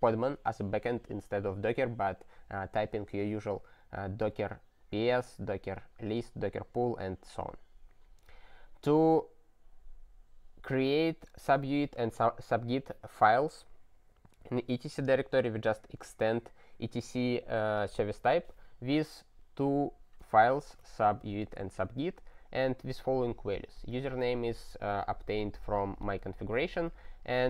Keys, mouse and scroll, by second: 5.4-6.6 scroll down 4, 6.6-8.6 scroll down 62, 8.6-16.0 scroll down 25, 16.0 click, 16.1 click, 19.6 click, 20.5 ctrl+alt+@, 21.4 ctrl+g, 23.8 click, 23.9 double click, 24.0 double click, 26.0 click, 26.1 click.